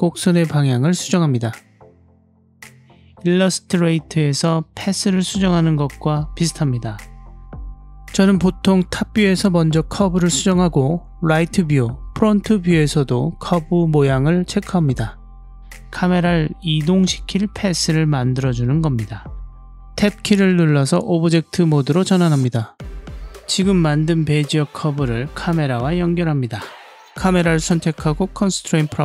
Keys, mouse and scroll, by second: 0.2 g, 2.4 click, 3.0 click, 3.6 shift+middle click, 4.5 click, 4.9 g, 6.9-7.9 drag, 8.2 g, 9.2 click, 11.5 click, 11.8 g, 15.0 click, 16.3 click, 16.8 click, 17.0 g, 17.9 click, 21.3 Tab, 22.9-23.9 drag, 27.2 click.